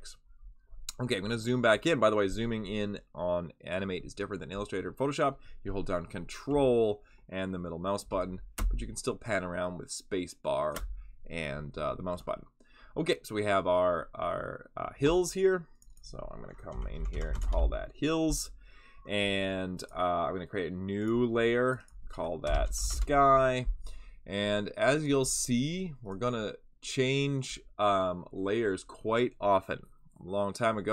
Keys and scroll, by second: 8.5 space, 16.4-17.9 typing, 22.2-23.3 typing.